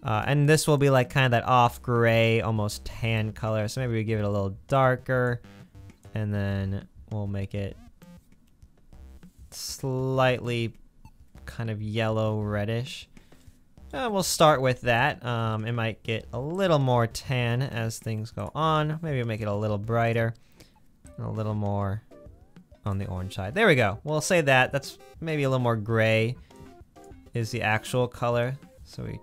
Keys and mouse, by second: 1.8 click, 14.4-16.6 middle drag, 19.5 click, 23.6-24.2 middle drag, 25.5-29.2 drag.